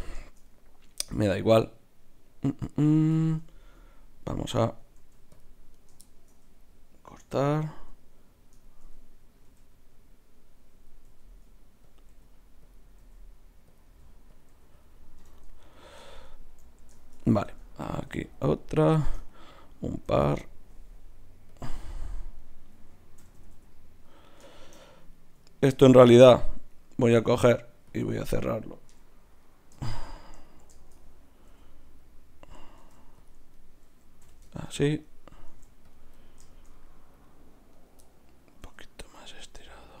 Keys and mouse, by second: 5.0 ctrl+r, 7.3 KP_Divide, 9.5 g, 11.0 s, 12.1 g, 13.0 g, 13.9 s, 14.5 g, 15.2 KP_Divide, 17.9 ctrl+r, 20.2 ctrl+r, 22.4-24.1 drag, 23.3 f, 23.4 f, 23.7 f, 27.2 ctrl+Tab, 28.9 KP_Divide, 31.5 g, 32.8 ctrl+Tab, 33.5-35.5 drag, 34.2 f, 35.5 ctrl+Tab, 37.7-40.0 drag, 38.6 g, 39.6 g.